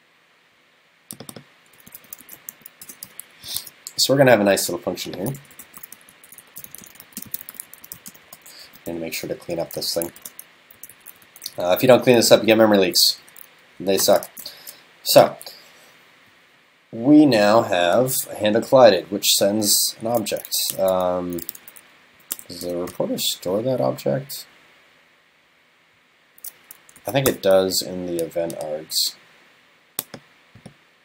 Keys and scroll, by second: 10.2 shift+super+Right, 10.8 super+c, 11.8 super+v, 12.3 alt+Left.